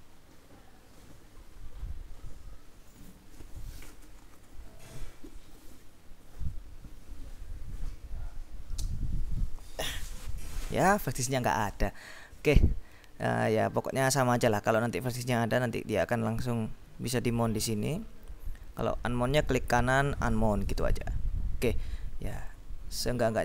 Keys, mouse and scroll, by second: 14.1-15.1 drag, 17.9 click, 19.5 right click, 20.9 click, 22.8 click.